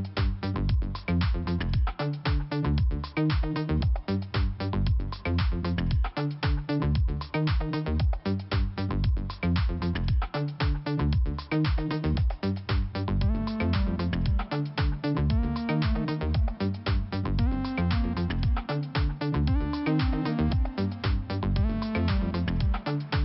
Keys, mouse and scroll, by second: 0.2 click, 1.6 middle click, 4.8 click, 4.9 click, 9.7 click, 9.9 click, 10.5 right click, 10.6 right click, 11.6 click, 11.8 click, 12.3 click, 15.1 click, 18.5 click, 19.8 click, 22.2 click.